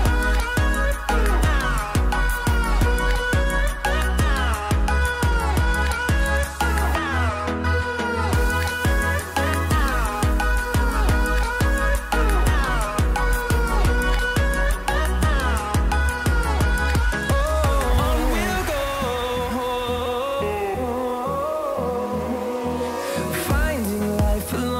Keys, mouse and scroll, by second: 0.3-1.3 scroll down 2, 1.3 click, 3.6 click, 8.3 click, 9.3 scroll down 1, 10.0 click, 10.4 right click, 11.4 click, 12.0 click, 13.4 click, 14.5 right click, 17.0-20.4 drag, 20.4 ctrl+z, 21.5 click, 21.9 scroll up 1, 22.8-24.7 drag.